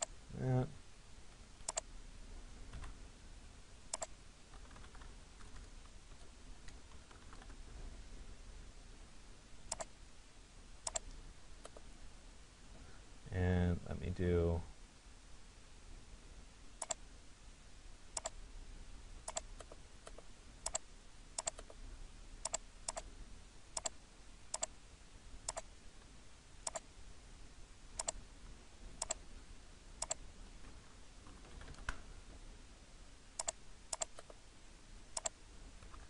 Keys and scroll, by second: 0.8 Escape, 7.3 e, 31.5 Return.